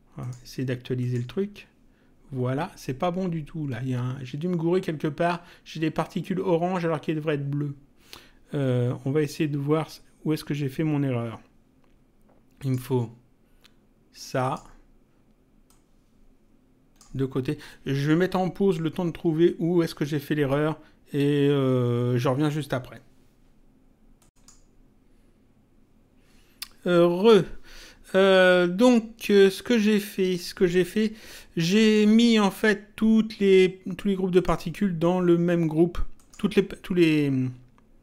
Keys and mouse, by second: 0.2 click, 12.5 click, 14.4 click, 15.6 click, 24.2 click, 31.8 click, 34.2 click, 36.1 click.